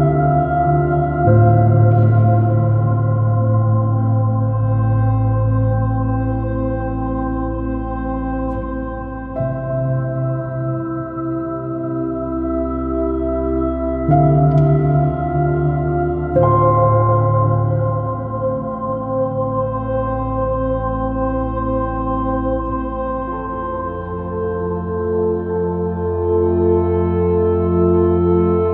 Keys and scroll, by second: 0.2 x, 1.9 r, 2.1 b, 3.4 space, 4.9 b, 6.6 alt+super+z, 7.1 r, 7.4 b, 10.0-11.1 typing, 11.7 super+-, 14.4 space, 20.6 x, 21.5 x, 24.9 space, 26.5 space, 27.5 space.